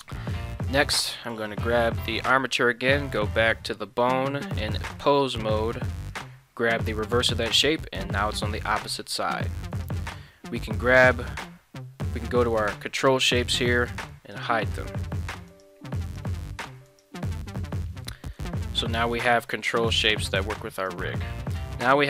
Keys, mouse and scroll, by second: 1.3 right click, 2.2 ctrl+Tab, 4.8-6.3 drag, 9.3 ctrl+Tab, 9.7 click, 13.4 click, 14.3 click, 15.5 right click, 16.0 right click, 16.6 ctrl+Tab, 18.3 g, 19.3 right click, 20.2 g, 20.8 right click.